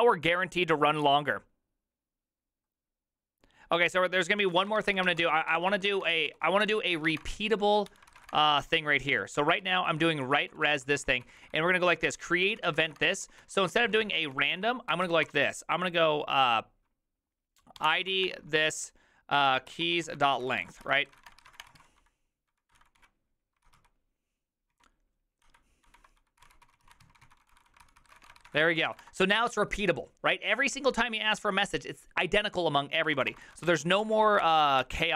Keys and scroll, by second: 4.5-5.9 typing, 5.6 ctrl+c, 6.0 Return, 6.1 ctrl+u, 6.3 ctrl+u, 6.6 ctrl+c, 7.0 ctrl+c, 7.0 ctrl+:, 7.1-15.3 typing, 7.2 Return, 7.3 ctrl+u, 7.4 ctrl+u, 17.8-18.2 typing, 19.5-24.7 typing, 26.0-29.4 typing, 32.9-34.1 typing, 34.1 ctrl+c, 34.2 ctrl+c, 34.4 Up, 34.8 Up.